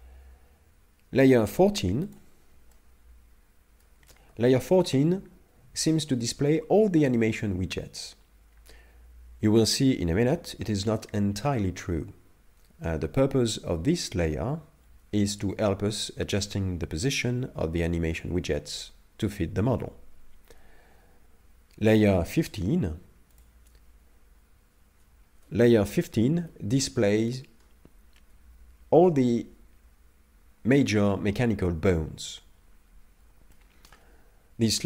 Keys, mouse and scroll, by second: 2.1 click, 2.7 middle click, 4.0 a, 4.2 a, 23.4 click, 25.8 KP_Divide, 26.5 middle click, 33.5 shift+middle click.